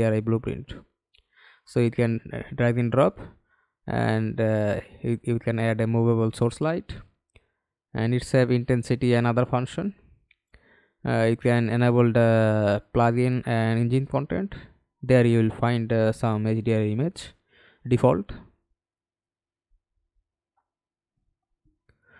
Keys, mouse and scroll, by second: 0.7 scroll up 2, 3.3-4.0 scroll down 7, 4.5 scroll up 2, 8.9-9.6 scroll down 10, 10.1 scroll up 1, 19.2-20.4 scroll down 7, 21.6 scroll down 4.